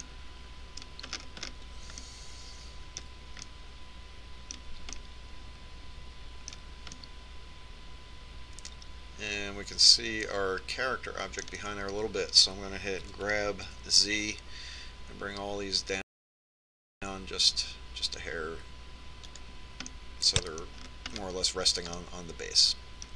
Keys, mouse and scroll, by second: 1.9-8.8 middle drag, 9.3-10.6 middle drag, 15.0 g, 20.9-23.1 middle drag.